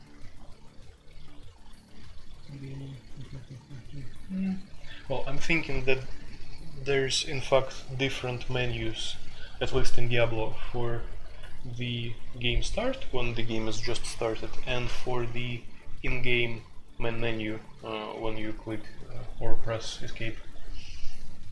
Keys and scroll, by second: 0.0-21.5 typing.